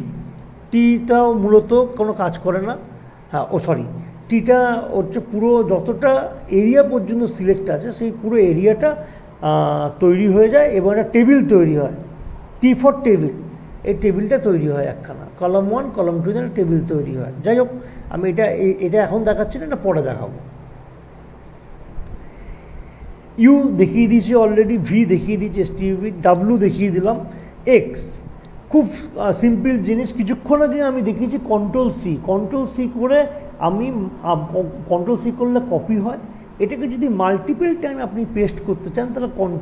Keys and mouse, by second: 2.2 ctrl+t, 13.8 click, 17.8 click, 19.8 ctrl+z, 21.6 click, 29.4 click.